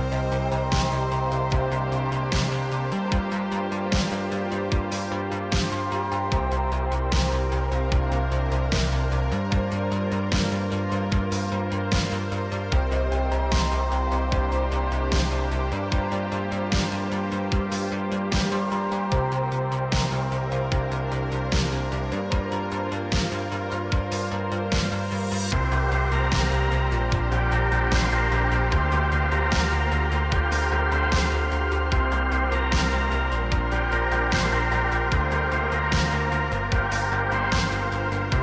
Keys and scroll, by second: 0.0 Tab, 0.5 Tab, 1.1 shift+s, 2.0 s, 5.9 g, 9.0 ctrl+Tab, 9.9 Tab, 11.5 ctrl+KP_Add, 13.6 ctrl+Tab, 15.1 ctrl+Tab, 15.9 r, 16.1 r, 18.0 r, 18.1 r, 19.5 r, 20.3 r, 20.5 z, 28.4 ctrl+Tab, 28.9 ctrl+Tab, 29.4 ctrl+Tab, 31.3 Tab.